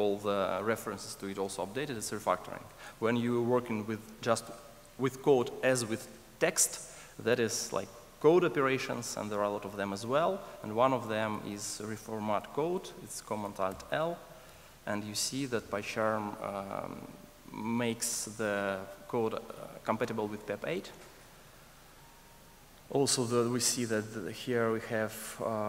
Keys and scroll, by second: 13.9 alt+super+l.